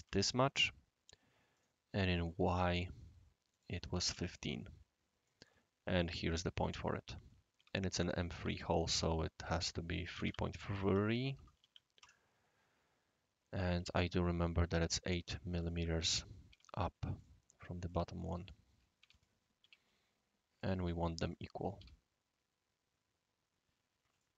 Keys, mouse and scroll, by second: 0.1 Return, 1.5 click, 2.7 click, 3.5 click, 3.9 1, 4.1 5, 4.2 Return, 5.3-6.6 right drag, 7.6 d, 8.4 d, 8.8 click, 9.4 click, 9.8-14.2 typing, 15.0 click, 15.3-20.1 typing, 15.6 click, 17.1 click, 17.9 click, 18.4 click, 20.6 click, 21.3 click, 21.8 typing, 24.2-24.3 middle drag.